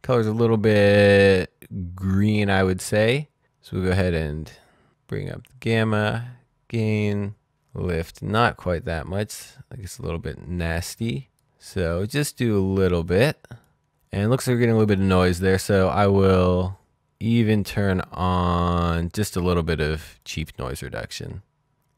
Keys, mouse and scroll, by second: 3.5-4.1 scroll up 1, 4.1-4.6 scroll down 1, 4.6-6.5 scroll up 1, 8.1 click, 14.4 click, 19.0 click.